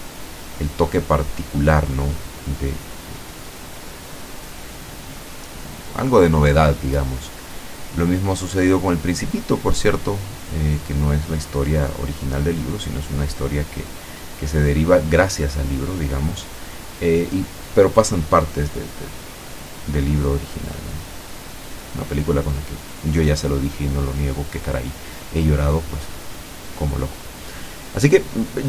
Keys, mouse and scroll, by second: 2.3 ctrl+middle click, 2.5 ctrl+z, 3.6 ctrl+middle click, 4.5 click, 5.4 click, 6.1 click, 6.8 middle click, 7.5 click, 8.1 click, 8.8-10.1 middle drag, 10.2 click, 10.9-12.1 middle drag, 12.5 middle click, 13.1-14.3 scroll up 1, 14.3 click, 14.8 click, 15.2 click, 15.7 click, 18.5-19.5 drag, 19.9-21.2 drag, 21.6-23.6 drag, 24.0 ctrl+z, 24.8 click, 25.2 click, 25.6 click, 26.4 click, 26.8 click, 27.3 click, 28.2 click.